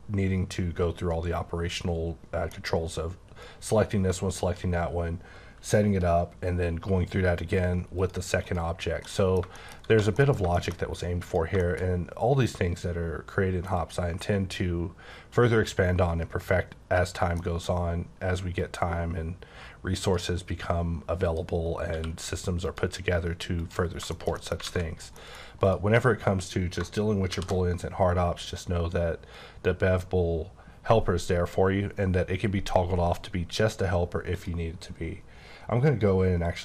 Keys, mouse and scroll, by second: 4.3 click, 8.0 click, 8.4 click, 9.0 middle click, 9.5 shift+middle click, 9.8 1, 10.2 middle click, 10.5-11.3 shift+scroll up 2, 10.7 middle click, 11.3 click, 11.6 shift+middle click, 13.8 click, 17.0 click, 17.4 middle click, 17.7 scroll up 2, 18.6 click, 21.2 click, 21.6 scroll up 3, 21.9 q, 22.6 click, 23.6 click, 24.0 shift+scroll down 3, 24.1 shift+middle click, 24.6 alt+a, 25.2 middle click, 25.6 click, 27.3 b, 34.3 click, 36.4 click.